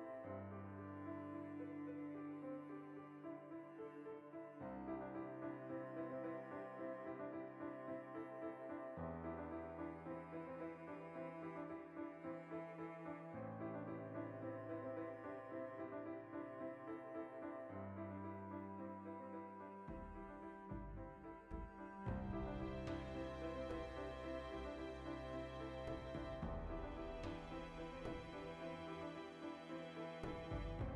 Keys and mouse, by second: 0.8 right click, 1.2 f, 1.6 right click, 2.0 f, 2.7-10.0 middle drag, 3.5 a, 4.0 KP_Decimal, 9.7 3, 10.0 alt+shift+right click, 10.2 middle click, 11.0 alt+shift+right click, 11.9 ctrl+KP_Subtract, 12.6 middle click, 13.0-21.7 shift+middle drag, 17.7 Tab, 18.3 ctrl+2, 21.7 z, 28.0-29.5 drag, 29.5 Tab, 29.6-30.9 shift+middle drag, 30.3 a.